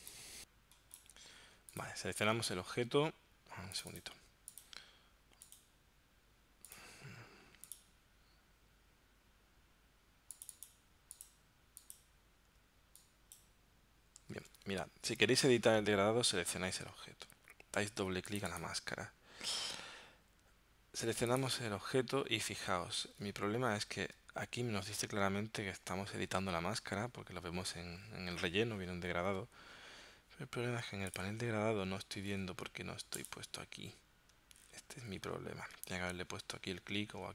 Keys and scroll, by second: 14.3 super+z.